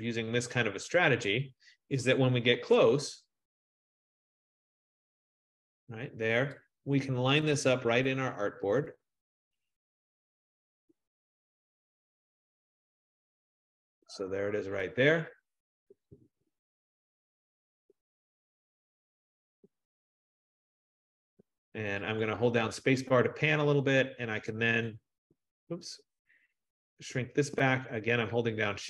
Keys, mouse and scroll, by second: 1.3-7.3 drag, 2.6 ctrl+0, 14.1-19.5 drag, 23.2 click, 23.4 click, 25.0 click, 28.6 click.